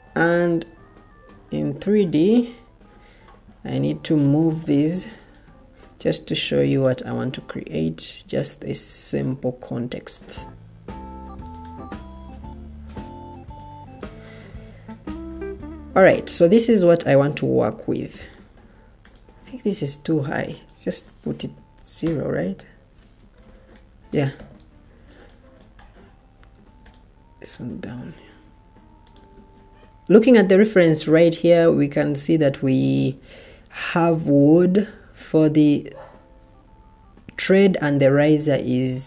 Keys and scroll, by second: 1.2 F5, 4.4 o, 5.9 Escape, 6.1 Escape, 12.2 Escape, 13.3 o, 17.5 Escape, 18.5 ctrl+z, 21.3 0, 22.2 Return, 23.1 Escape, 24.3 o, 26.4 Escape, 29.2 Escape.